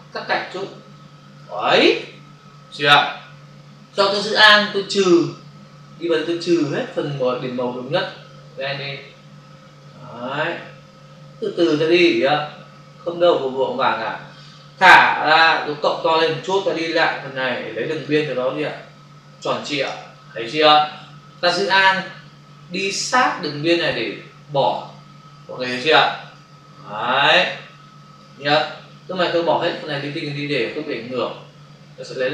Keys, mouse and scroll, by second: 5.2 alt+click, 15.3 ], 16.6 click, 17.8 click, 19.9 space, 23.2 alt+click, 26.2 space, 27.0 click, 27.1 space.